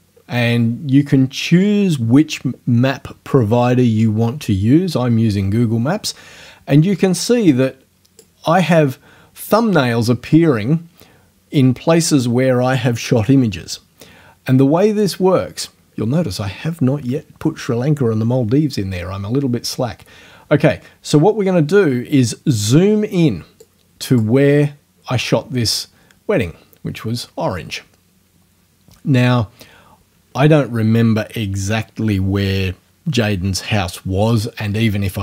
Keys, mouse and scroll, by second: 7.7 click, 20.0-20.7 scroll up 1, 23.6 click, 25.9-26.3 scroll up 1, 27.2-27.6 scroll up 2.